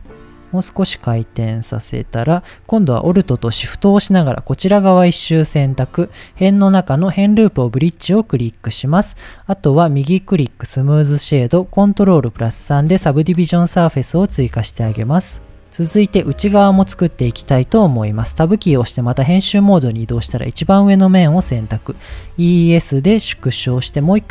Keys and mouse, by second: 1.0 click, 1.1 g, 1.7 click, 2.6 middle click, 6.3-7.6 drag, 8.2 middle click, 8.9 Tab, 9.3-9.6 middle drag, 9.9 right click, 11.0 middle drag, 12.5 ctrl+3, 13.0 middle drag, 13.9 middle click, 15.2 click, 15.5 middle click, 16.5 click, 17.5 Tab, 19.6 alt+click, 22.1 e, 23.3 click.